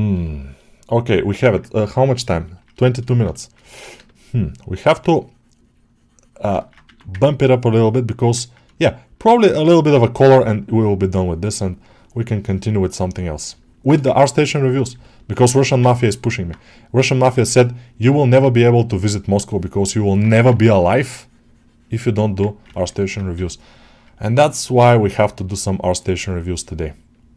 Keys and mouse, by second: 0.1 alt+shift+middle click, 0.4 alt+middle click, 1.0 alt+shift+middle click, 2.3 ctrl+alt+middle click, 2.7 alt+shift+middle click, 3.3 shift+click, 3.9-6.3 shift+drag, 6.5 ctrl+middle click, 7.0 ctrl+click, 8.0 click, 8.6 shift+click, 9.9 click, 10.1-13.4 ctrl+drag, 13.5 shift+click, 14.9 alt+middle click, 15.4 ctrl+click, 15.8 alt+middle click, 17.3 click, 18.0 alt+middle click, 19.8 middle click, 20.6 click, 22.0 middle click, 22.6 middle click, 22.9 middle click, 24.7-27.3 drag.